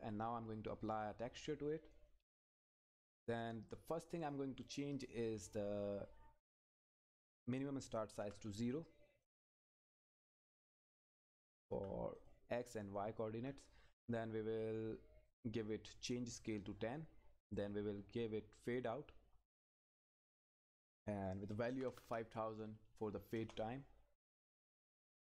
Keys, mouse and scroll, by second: 0.8 click, 4.3 click, 9.3 click, 15.3 click, 18.6 click, 23.3 Return.